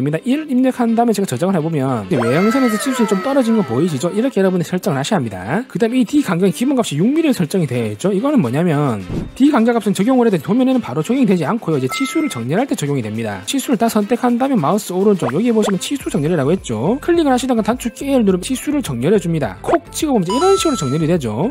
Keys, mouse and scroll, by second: 0.9 1, 14.0 click, 15.6 right click, 18.7 a, 20.0 click.